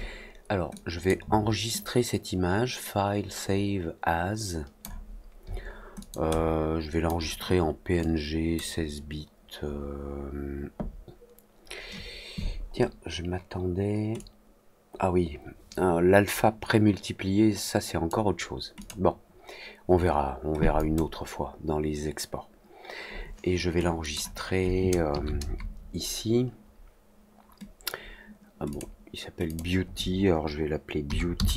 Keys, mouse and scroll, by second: 0.7 click, 1.7-4.7 drag, 5.9 click, 6.2-7.0 drag, 7.9-8.5 drag, 14.1-18.0 drag, 18.7 click, 20.7 click, 23.9 click, 28.6 click, 29.4 click.